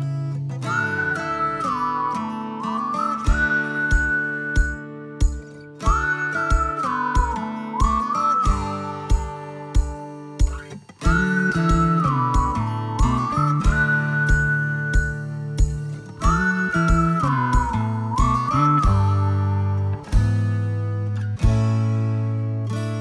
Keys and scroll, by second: 9.0 space, 10.6 l, 12.2 space, 22.8 l.